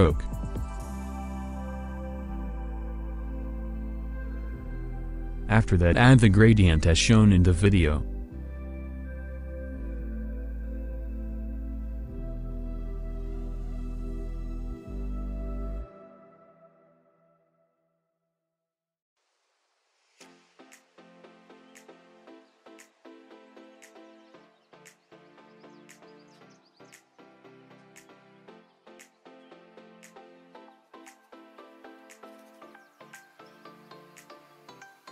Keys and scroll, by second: 1.1 alt+space, 1.7 alt+space, 3.0 alt+space, 3.6 alt+space, 4.1 alt+space, 11.9 8, 21.2 0, 29.8 KP_2, 31.3 0.